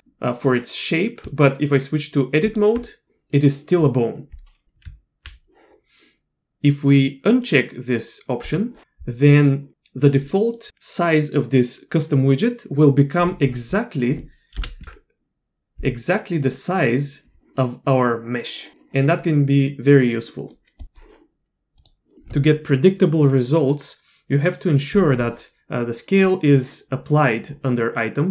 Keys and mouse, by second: 1.2 Tab, 4.8 Tab, 8.4 click, 9.3 middle click, 10.3 middle click, 14.5 KP_1, 14.8 Tab, 16.4 click, 20.3 click, 20.8-22.1 drag.